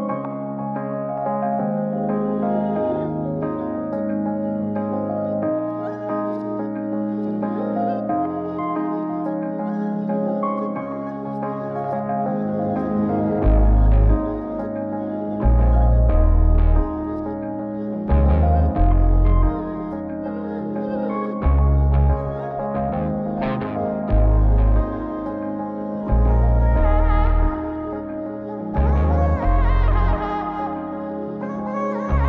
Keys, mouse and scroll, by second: 0.7-1.9 drag, 3.5 click, 4.1-4.7 scroll down 4, 4.7-5.3 scroll up 2, 6.6 click, 7.8 click, 9.3-10.5 drag, 13.3 click, 14.2 scroll down 1, 14.6 middle click, 15.0-15.6 scroll up 5, 15.6 middle click, 17.1 ctrl+shift+click, 17.8 ctrl+shift+click, 19.0 ctrl+shift+click, 20.2 ctrl+shift+click, 20.6-20.9 scroll down 2, 20.9 middle click, 21.8-22.9 scroll down 1, 22.9-23.4 scroll up 2, 23.4 middle click, 24.3 ctrl+shift+click, 26.4 scroll down 2, 27.1 click, 27.7-28.5 scroll up 2, 28.5-29.2 scroll up 1, 29.2 scroll down 1, 29.5 middle click, 30.2-32.0 scroll up 3.